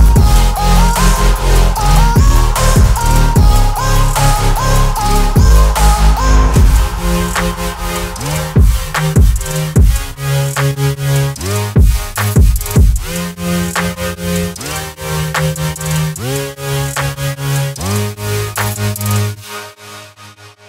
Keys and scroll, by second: 1.0 Escape, 9.2 F3, 15.7 shift+F2, 17.0 F9.